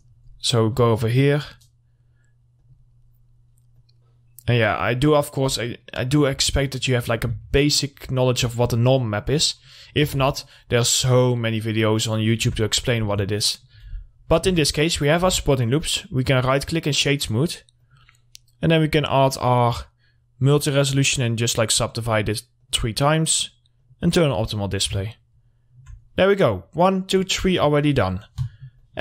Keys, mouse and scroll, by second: 0.1 middle click, 0.5 scroll down 1, 0.7 middle click, 1.4 scroll up 1, 2.6 click, 3.2 scroll up 1, 3.9-5.6 drag, 5.6 scroll down 1, 6.0 middle click, 7.5 alt+scroll down 1, 7.6 alt+middle click, 8.7 middle click, 9.1 scroll up 1, 9.7 middle click, 10.3 ctrl+r, 10.6 click, 12.7 Tab, 12.9 middle click, 13.2 scroll down 1, 13.5 middle click, 14.3-14.7 scroll up 1, 14.7 Tab, 15.2 middle click, 15.4 Tab, 16.2 right click, 16.8 click, 20.5 click, 20.7 click, 25.0 scroll down 1, 25.3 alt+middle click, 26.2 scroll down 1, 26.5 middle click, 27.8 click.